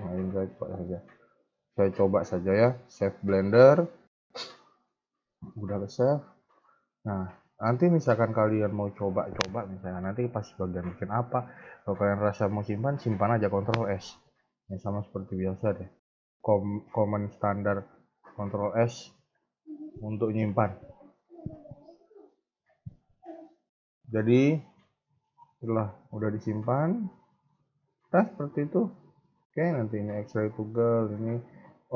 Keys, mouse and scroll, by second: 3.6 scroll up 1, 3.8-4.5 scroll down 3, 4.5 shift+middle click, 4.9-5.7 scroll up 3, 5.7 shift+middle click, 6.2-6.7 scroll down 2, 15.3 ctrl+s, 16.4-17.6 scroll up 1, 18.0 ctrl+s, 26.4-27.2 scroll down 2, 27.2 middle click, 28.3 KP_1, 29.7 click.